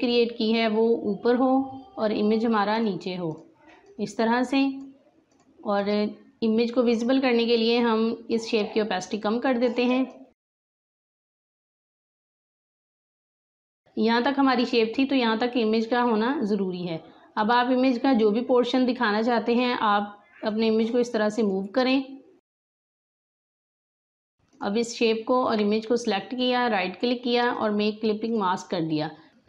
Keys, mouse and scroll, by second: 0.0 right click, 2.7-13.4 drag, 13.4 space, 13.4 click, 13.6 space, 18.6-25.0 drag, 26.4 right click, 27.5 click.